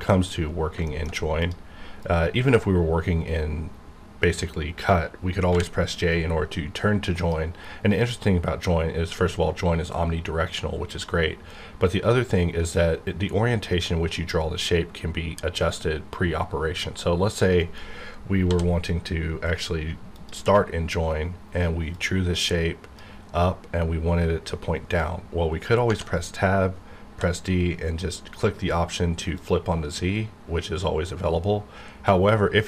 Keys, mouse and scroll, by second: 0.5 scroll up 2, 0.8-1.4 shift+middle drag, 1.4 click, 5.5 j, 17.5 right click, 18.4 d, 20.1-25.5 drag, 27.1 d, 29.4 click.